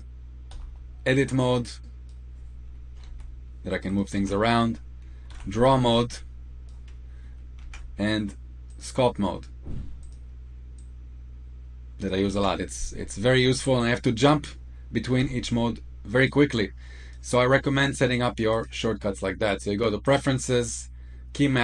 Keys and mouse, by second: 0.5 F2, 1.7-2.1 drag, 3.0 s, 4.2 ctrl+z, 5.3 F3, 5.9 click, 7.7 ctrl+z, 8.6-10.1 drag, 10.7 click, 12.4 ctrl+z, 15.1 F1, 16.2 click, 18.6-21.6 drag.